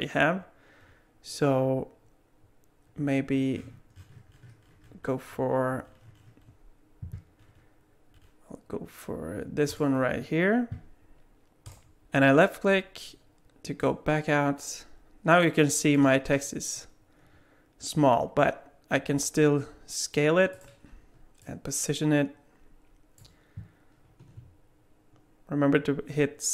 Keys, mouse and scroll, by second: 13.8 click, 19.1 s, 21.4 click.